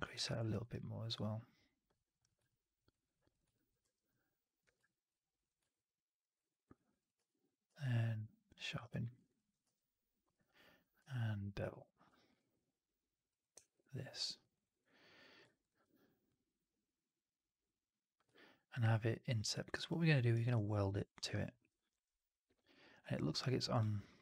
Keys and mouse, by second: 0.0 4, 0.3 alt+right drag, 0.5 alt+right drag, 2.1 drag, 2.4 click, 2.8 right drag, 3.2 click, 3.4 alt+drag, 3.7 r, 4.5 w, 4.7 alt+drag, 5.5 alt+right drag, 5.7-6.1 alt+drag, 6.3 alt+right drag, 6.5 alt+right click, 7.1 q, 7.6 q, 8.7 alt+drag, 8.9 alt+middle drag, 9.1 alt+right drag, 9.3 alt+drag, 13.5 alt+right drag, 13.7-14.3 alt+drag, 14.4 alt+right drag, 14.6 alt+right drag, 14.7-15.2 alt+drag, 17.6 click, 18.2-19.4 alt+drag, 19.5 alt+right drag, 19.8 alt+drag, 20.2 alt+right drag, 20.4-22.6 alt+drag.